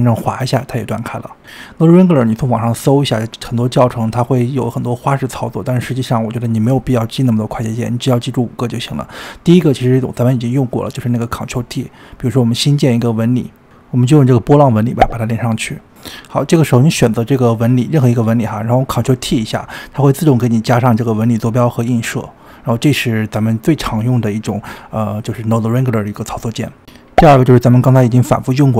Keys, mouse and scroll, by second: 0.5-2.6 ctrl+right drag, 2.6 click, 10.5 click, 11.1 shift+a, 15.5 click, 17.7-18.4 scroll down 2, 18.4 click, 20.7 ctrl+t, 21.8-22.4 scroll down 4, 22.4-23.1 shift+middle drag, 23.1-26.3 scroll up 5.